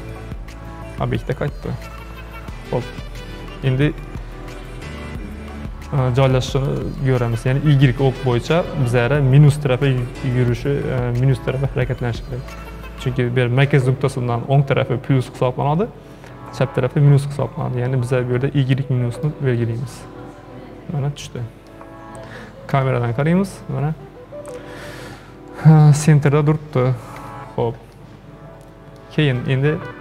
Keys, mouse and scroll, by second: 3.7-10.0 shift+middle drag, 19.1 click, 20.0-22.0 middle drag, 22.0-22.7 scroll up 1, 22.7 KP_0, 27.2 KP_0, 28.0-29.2 middle drag, 29.2-29.5 scroll down 2, 29.5-30.0 middle drag.